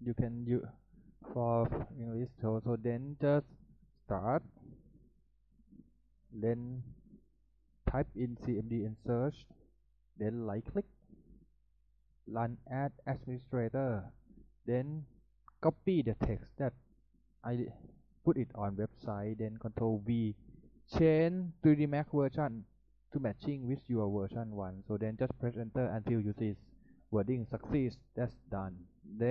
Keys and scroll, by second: 8.8-9.9 typing, 19.6 ctrl+v.